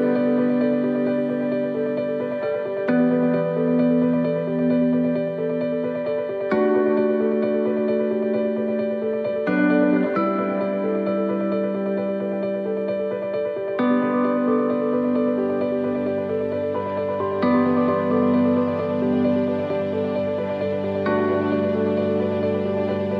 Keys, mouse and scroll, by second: 1.0 alt+s, 6.1 middle click, 9.2 click, 10.3 right click, 11.4 click, 13.6 alt+s, 17.9 middle click, 20.5 middle click, 21.5 click.